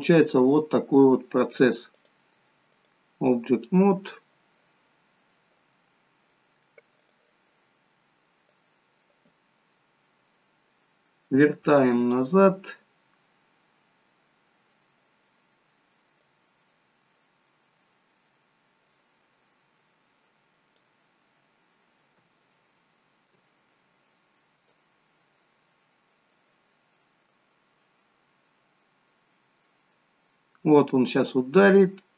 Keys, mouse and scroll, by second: 0.7 middle click, 2.1 click, 4.9-6.2 scroll down 8, 5.9 middle click, 7.0 click, 9.5 click, 13.4-15.5 scroll down 30, 17.1 click, 22.5 shift+middle click, 24.7 click, 28.6 click.